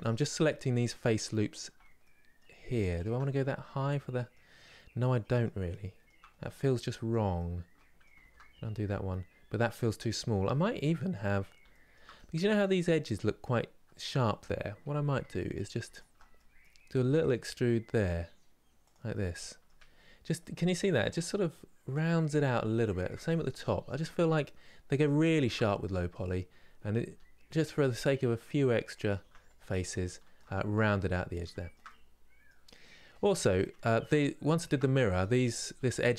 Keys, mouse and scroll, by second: 1.7-2.7 middle drag, 2.7 alt+shift+click, 3.0-4.2 middle drag, 4.2 scroll up 1, 4.9-6.0 middle drag, 6.0 scroll down 2, 6.6-7.9 middle drag, 7.9 ctrl+z, 8.4 scroll down 1, 9.8-11.0 scroll up 2, 11.4-15.3 shift+middle drag, 15.3 click, 16.0 middle click, 16.7 e, 18.8 middle click, 19.3 Tab, 19.7 scroll down 3, 20.1-23.4 middle drag, 23.4 scroll up 3, 23.7 Tab, 24.1-24.7 scroll up 2, 24.7 click, 25.3-26.7 middle drag, 26.7 e, 29.2-29.7 scroll down 1, 29.7 shift+middle click, 30.2-30.7 scroll down 1, 30.7-32.3 middle drag, 32.3 scroll up 2, 32.8 Tab, 33.1-34.3 middle drag, 34.3 alt+click, 34.8 middle click, 35.4 2.